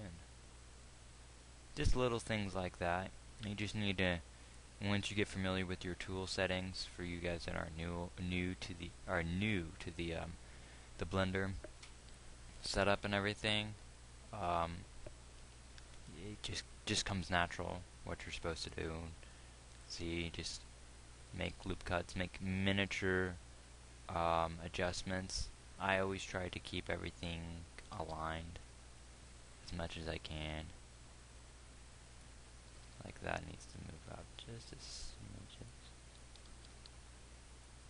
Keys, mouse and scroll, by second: 3.9 g, 19.7 ctrl+r, 21.9 g, 28.5 g, 33.2 g, 37.0 g.